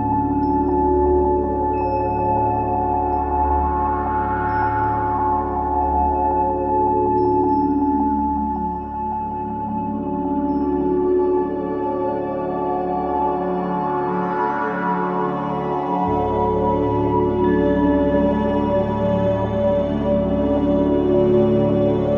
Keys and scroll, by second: 0.4 v, 0.6 space, 3.9 space, 9.4 ctrl+3, 9.8 ], 10.4 KP_3.